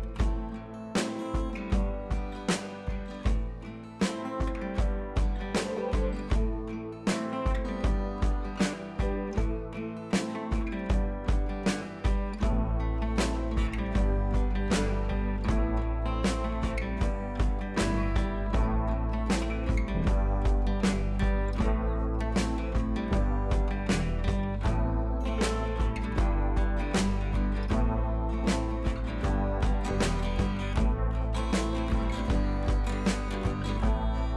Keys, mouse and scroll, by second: 0.3 click, 4.5-5.0 shift+drag, 6.7 Left, 7.4 shift+click, 9.7 Up, 12.9 click, 14.1 click, 14.6 shift+click, 16.5 ctrl+z, 16.7 click, 17.2 Down, 17.8 click, 23.8-26.2 drag, 28.2 alt+scroll down 1, 29.5 click, 30.7-33.6 drag.